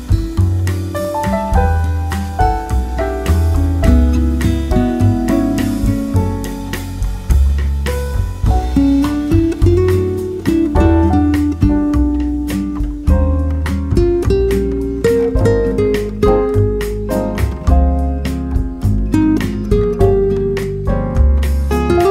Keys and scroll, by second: 9.6 ctrl+c.